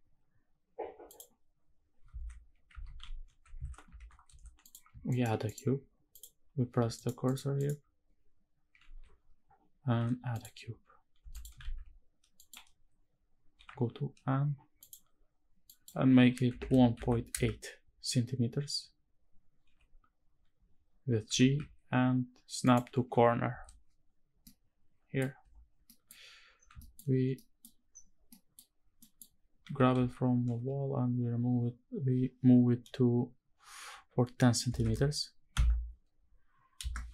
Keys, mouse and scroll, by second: 1.1 click, 1.8 ctrl+s, 2.6 shift+`, 4.8 shift+right click, 5.2 shift+right click, 5.8 click, 7.0 shift+right click, 7.3 shift+right click, 8.5 shift+a, 10.9 x, 11.4 shift+a, 13.3 n, 14.5 click, 15.4-17.0 drag, 19.4 n, 21.0 g, 22.4 ctrl+click, 23.2 KP_Decimal, 23.8-24.1 scroll down 3, 24.1-24.9 middle drag, 25.1-25.6 scroll down 2, 25.6 middle drag, 25.8-26.2 scroll up 2, 26.2-27.0 scroll down 3, 26.5 shift+middle drag, 27.0-27.4 middle drag, 27.6-28.0 scroll down 3, 28.0 middle drag, 28.3-28.7 scroll up 2, 28.7 middle drag, 29.4 g, 29.7 x, 30.2 y, 34.4 KP_1, 34.5 KP_0, 35.2 KP_Subtract, 36.5 KP_Enter, 36.8 Tab.